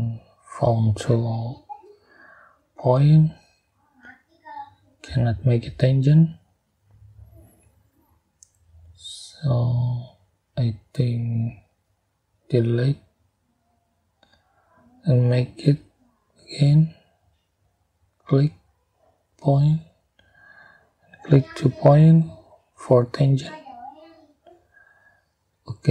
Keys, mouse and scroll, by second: 0.5 click, 3.5 click, 4.5 click, 6.2 click, 7.6 click, 7.9 click, 8.7-9.2 scroll down 2, 9.5 scroll up 2, 10.8 click, 12.5 Delete, 15.1 click, 16.7 click, 19.1 click, 19.8 right click, 21.4 click, 22.9 click, 25.2 click.